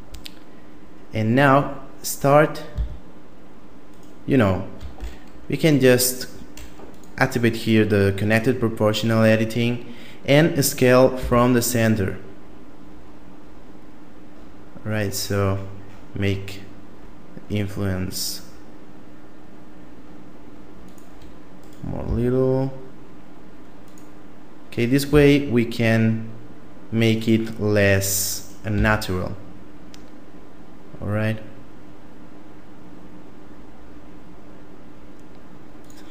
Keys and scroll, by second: 2.7 s, 11.2 s, 22.0 s, 25.1 s, 28.7 s.